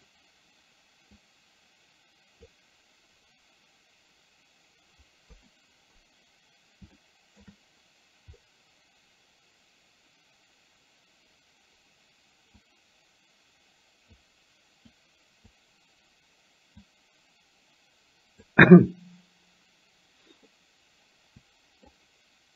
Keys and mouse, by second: 1.2-2.6 drag, 5.2 KP_1, 7.1 shift+middle click, 12.6-14.2 drag, 15.0 click, 16.9-18.5 drag, 20.5-22.0 middle drag.